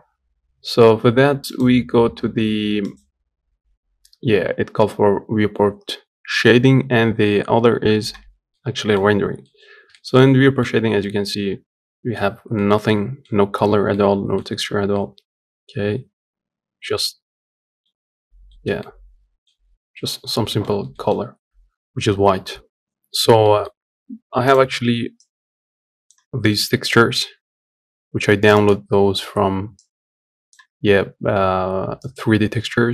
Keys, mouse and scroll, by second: 1.3-5.4 drag, 8.3 middle click, 8.9 scroll down 2, 9.2 middle click, 9.4-9.7 scroll up 1, 9.7 shift+middle click, 10.5 scroll down 1, 10.8-12.0 middle drag, 12.0 scroll up 1, 12.3-17.9 shift+middle drag, 17.9-18.2 scroll down 1, 18.2-19.3 shift+middle drag, 19.3-19.7 scroll down 1, 19.7 middle click, 20.0 scroll up 1, 20.2-32.9 shift+middle drag.